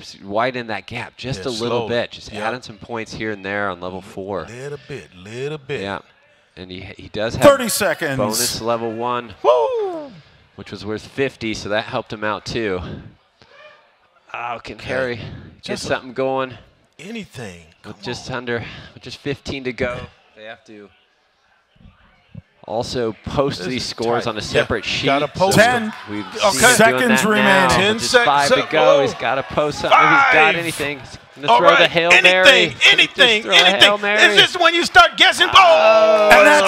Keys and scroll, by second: 1.3-2.8 typing, 3.8 (, 7.1 ,, 11.8 =, 18.6 BackSpace, 21.1 =, 22.2 0, 23.5 ), 25.9 End, 28.0 Return, 29.6 Page_Up, 30.6 ctrl+Left, 31.2 ctrl+Left, 31.6 ctrl+Left, 32.0 ctrl+Left, 32.6 Down, 32.8 Down, 32.9 Down.